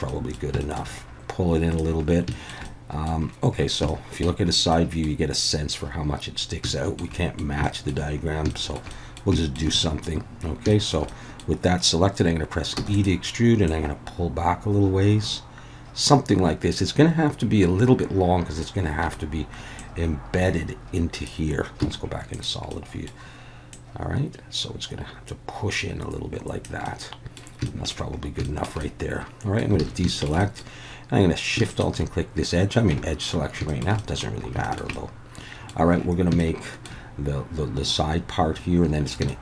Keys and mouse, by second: 0.1 middle click, 0.7 shift+middle click, 1.2 click, 2.5 shift+middle click, 2.8 middle click, 3.9 shift+middle click, 4.9 middle click, 6.8 shift+middle click, 7.2 middle click, 7.8 shift+middle click, 8.6 shift+middle click, 9.0 middle click, 9.5 shift+middle click, 9.8 middle click, 10.8 shift+middle click, 11.2 click, 12.8 e, 12.9 click, 13.7-16.7 drag, 19.0 a, 19.9-21.3 drag, 21.8 z, 22.7 middle click, 23.8-26.6 drag, 26.8 middle click, 27.8 shift+middle click, 28.6 shift+middle click, 28.9 middle click, 29.8 alt+a, 30.1 shift+middle click, 30.4 middle click, 31.7 alt+shift+click, 33.7 shift+middle click, 34.0 middle click, 34.6 shift+middle click, 34.9 middle click, 36.4 shift+middle click, 39.3 shift+middle click.